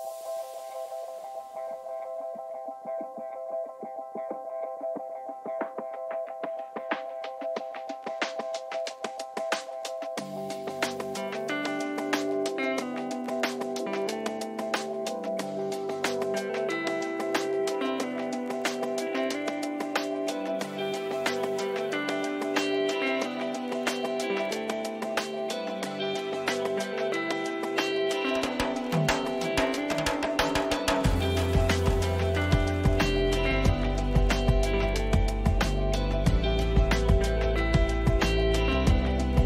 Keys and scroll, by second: 0.1 Return, 16.4 ctrl+z.